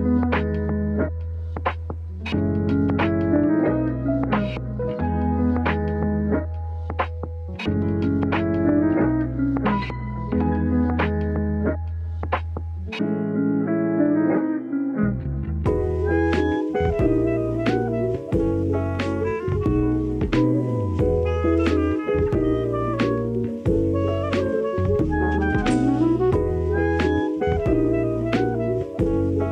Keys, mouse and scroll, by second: 0.7 shift+middle click, 1.6 s, 2.7 shift+middle drag, 3.4 Tab, 3.8 Tab, 4.7 KP_7, 5.3 shift+middle click, 5.6 shift+middle click, 7.1 s, 7.2 x, 8.4-9.9 y, 10.3 y, 10.3 KP_1, 11.1 click, 11.6 click, 13.3 middle click, 14.1 middle click, 14.5 shift+middle click, 16.0 click, 16.0 i, 18.6 s, 19.0 click, 19.5 middle click, 20.5 middle click, 21.4 click, 22.1 KP_1, 22.8 shift+middle click, 23.7 s, 24.3 ctrl+z, 25.1 e, 27.9 e, 28.5 click, 28.8 ctrl+z, 29.2 click.